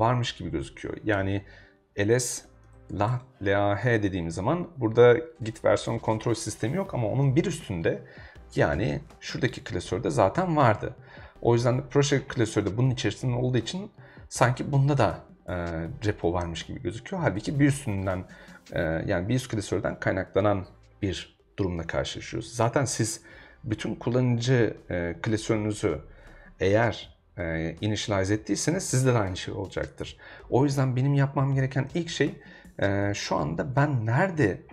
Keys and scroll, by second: 0.9-3.4 typing.